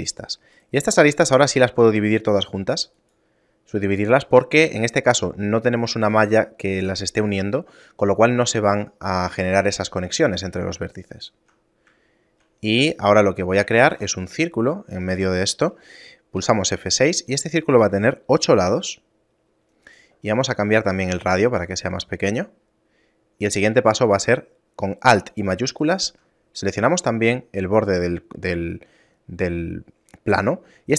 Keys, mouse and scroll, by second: 0.1 shift+right click, 0.6 shift+right click, 1.0 shift+right click, 1.6 w, 11.2 shift+middle click, 11.7 middle click, 12.1 shift+middle click, 13.9 shift+a, 16.5 F6, 25.8 alt+shift+right click.